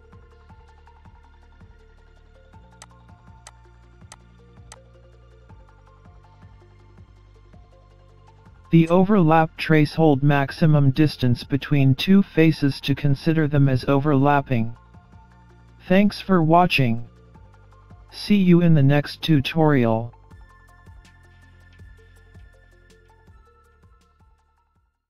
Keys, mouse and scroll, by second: 2.4 click, 3.5 click, 4.3-4.7 scroll up 2, 4.7 middle click, 6.4 click, 7.1 click, 7.8 click, 8.4 click, 9.2-9.5 scroll down 3, 10.0-10.4 scroll down 2, 10.3-10.8 scroll up 3, 10.8 middle click.